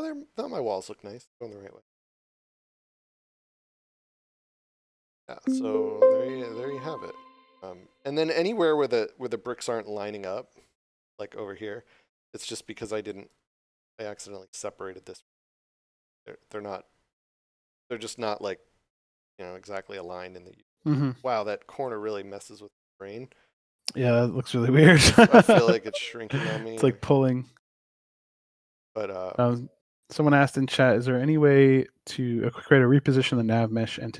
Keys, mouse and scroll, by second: 1.8 click, 7.5 click, 11.1 w, 12.5 shift+click, 13.3 shift+s, 13.6 d, 20.9 middle click, 21.5 click, 22.3 shift+d, 22.5 shift+w, 23.4 click, 23.7 shift+w, 24.2 d, 27.5 s, 28.1 click, 31.4 shift+click.